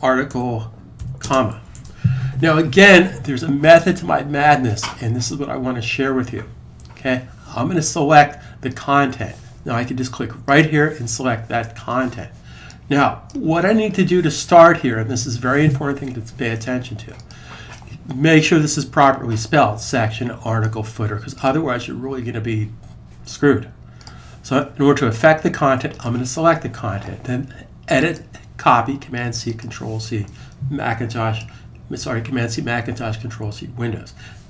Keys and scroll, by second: 0.0-0.6 typing, 1.6 super+s.